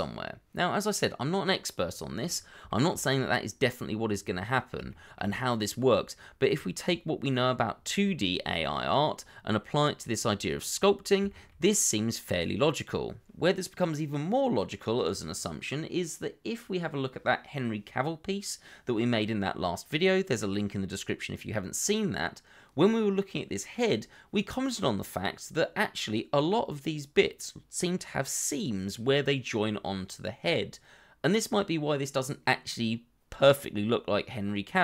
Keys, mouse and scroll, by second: 2.2-2.6 scroll down 1, 2.6 shift+middle click, 3.2 middle click, 4.9 shift+middle click, 5.3-5.6 scroll up 1, 9.7 scroll down 1, 10.0 middle click, 10.7-11.2 scroll up 1, 11.2 shift+middle click, 11.5-11.9 scroll up 1, 19.0-19.8 scroll up 1, 19.8 middle click, 21.2 shift+middle click, 21.7 middle click, 22.4 scroll up 1, 23.1 middle click, 24.4-24.9 scroll down 1, 24.9 middle click, 26.6-26.9 scroll down 1, 26.9 middle click, 27.3 scroll up 1, 27.7 shift+middle click, 27.9-28.5 shift+scroll up 2, 28.9 middle click, 29.5 scroll down 1, 29.8 shift+middle click, 33.7-34.6 scroll up 1.